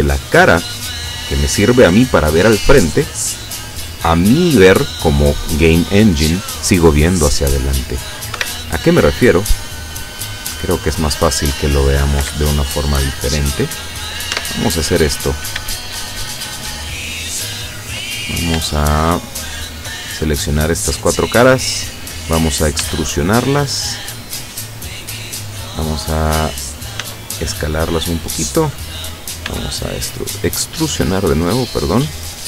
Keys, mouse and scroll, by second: 8.4 Escape, 10.5-11.7 middle drag, 11.8 scroll up 2, 12.6 shift+scroll up 2, 13.2 shift+middle click, 14.4 Tab, 15.4 shift+right click, 15.8 shift+right click, 16.7 shift+right click, 17.2 shift+right click, 18.1 shift+middle click, 19.1 shift+right click, 19.7 shift+right click, 20.5 middle click, 22.8 e, 25.4 click, 27.1 s, 28.3 click, 29.5 e, 31.3 click.